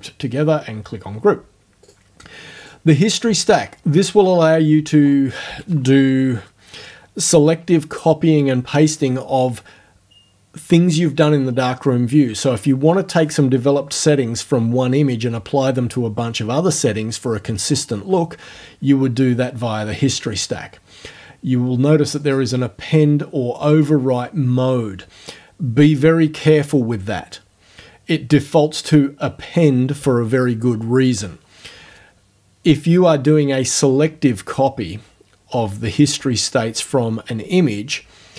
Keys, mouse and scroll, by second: 1.9 click, 2.6 click, 22.2 click, 23.7 click, 28.8 scroll up 2.